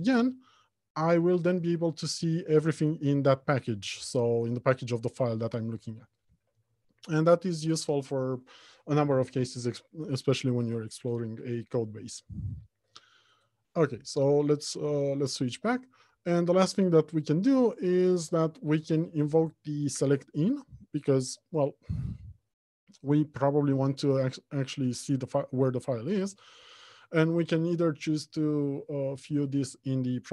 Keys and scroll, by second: 2.6 Left, 14.0 ctrl+Tab, 18.5 alt+F1.